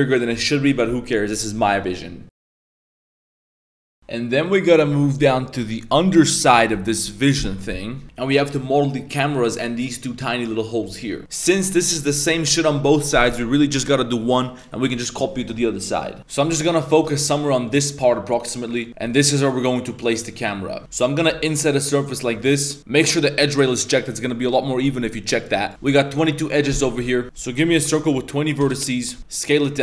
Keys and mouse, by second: 16.2 ctrl+z, 16.2 middle click, 16.9 middle click, 17.1 shift+middle drag, 17.3-17.7 middle drag, 18.4-18.8 middle drag, 19.1-20.5 middle drag, 21.3 i, 23.1 click, 23.5-25.7 drag, 25.7 shift+s, 27.2-28.7 drag, 29.2 Tab, 29.2 1, 29.2 s.